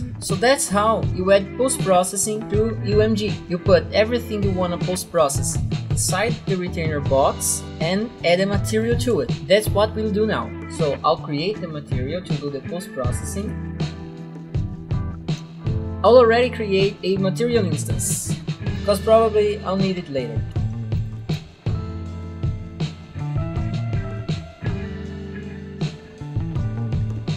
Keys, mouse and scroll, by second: 11.5 click, 13.5 click, 14.0 right click, 14.1 click, 14.1-15.8 typing, 16.4 right click, 17.7 click, 18.7 End, 18.9-21.0 typing, 20.5 Home, 20.7 Right, 21.3 Return, 22.3 click, 23.1 click, 24.0-24.5 scroll down 4, 24.8 scroll, 25.0 click, 25.5 click, 26.5 middle click, 26.9 click.